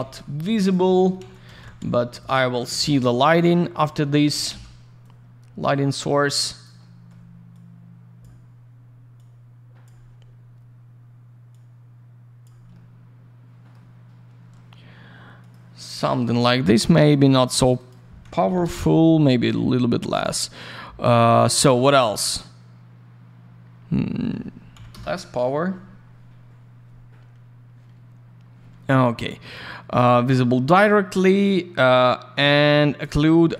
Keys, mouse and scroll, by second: 0.1 click, 0.7 click, 0.8 alt+middle click, 1.1 alt+a, 1.2-2.1 typing, 1.3 click, 1.4 click, 2.2 click, 4.0 alt+middle click, 4.4 typing, 5.0 click, 6.8 alt+middle click, 7.5 click, 9.1 click, 11.5 click, 12.7 alt+middle click, 15.3 click, 15.5 click, 17.6 click, 17.7 click, 17.7 click, 17.8 click, 18.4 5, 18.6 Return, 24.9 Return, 28.3-28.8 scroll up 1, 29.9 click, 30.0 click, 33.0 click, 33.1 click.